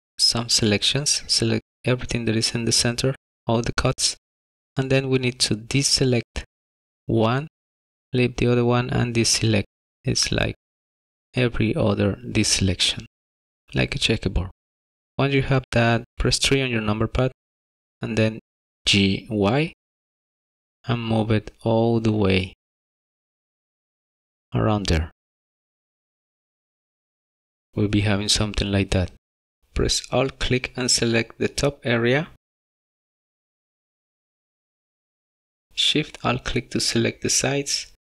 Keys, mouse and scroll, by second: 16.0 KP_3, 30.2 alt+click, 32.5 alt+click, 35.3 alt+shift+click, 36.1 middle click.